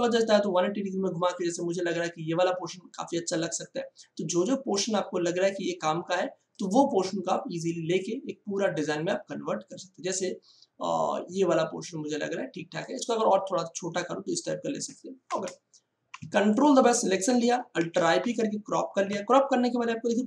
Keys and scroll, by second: 15.3 Return, 17.9 alt+i, 18.1 alt+p.